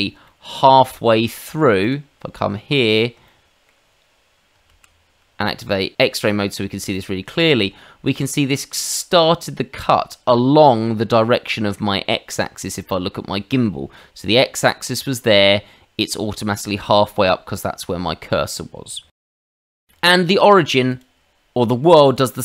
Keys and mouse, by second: 0.2 middle click, 1.8 click, 3.2 middle click, 4.7 shift+z, 18.1 middle click, 19.1 ctrl+z, 19.2 ctrl+z, 19.9 shift+middle click, 20.9 click, 22.0 click.